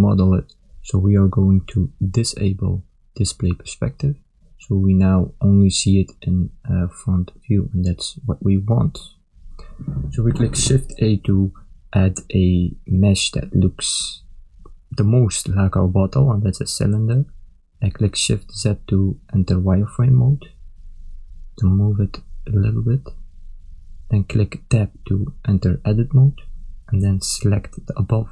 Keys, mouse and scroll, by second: 1.7 click, 3.0 click, 4.6 KP_1, 5.7 middle click, 7.6 KP_1, 8.3 ctrl+middle click, 9.2 shift+middle click, 9.9 ctrl+middle click, 11.4 shift+a, 17.1 shift+z, 17.6 ctrl+middle click, 19.5 click, 22.8 ctrl+middle click, 24.0 shift+middle click, 25.0 Tab, 25.9 a, 27.4 b.